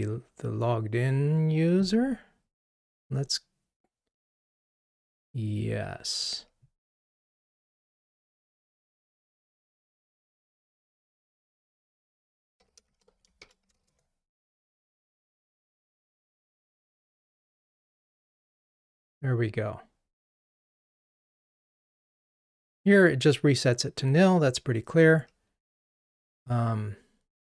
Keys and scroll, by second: 10.9 shift+F6, 15.3 ctrl+r.